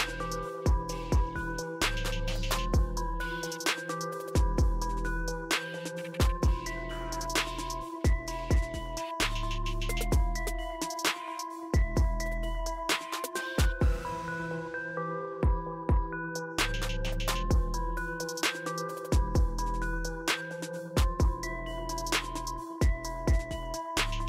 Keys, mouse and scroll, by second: 2.4 right click, 5.2 click, 7.7 click, 13.2-14.1 typing, 17.3 click.